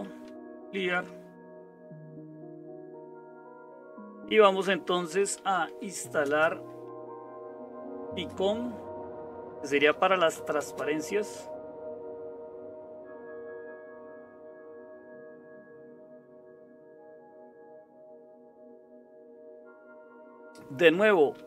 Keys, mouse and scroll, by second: 0.0-21.4 typing, 19.5 Return.